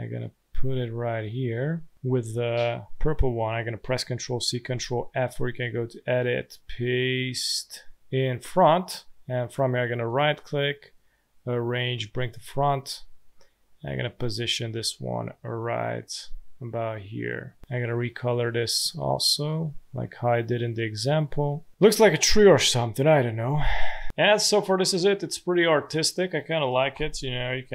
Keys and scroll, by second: 2.7 space, 3.9 ctrl+c, 4.4 ctrl+f, 23.6 space, 25.4 space, 26.7 v.